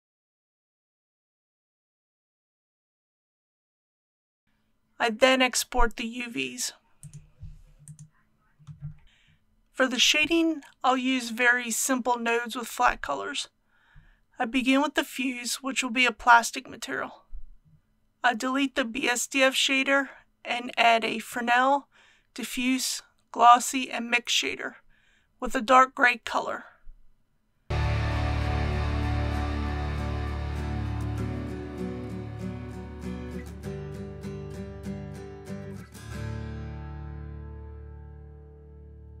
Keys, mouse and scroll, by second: 0.0 click, 0.2 click, 0.9-2.3 typing, 1.1 click, 1.6 click, 2.0 click, 2.4 click, 3.9 click, 4.0 g, 4.1 click, 4.2 g, 4.4 click, 11.3-11.9 scroll up 1, 12.2 shift+middle click, 13.1-13.9 scroll up 1, 14.1 shift+middle click, 15.0 KP_1, 16.6 shift+middle click, 17.6 scroll up 1, 17.7 Return, 28.4-39.2 shift+middle drag.